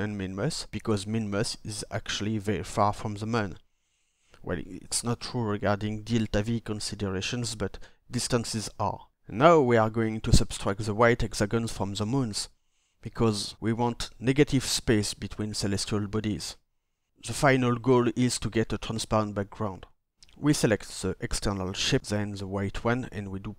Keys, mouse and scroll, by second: 20.8-21.8 shift+drag.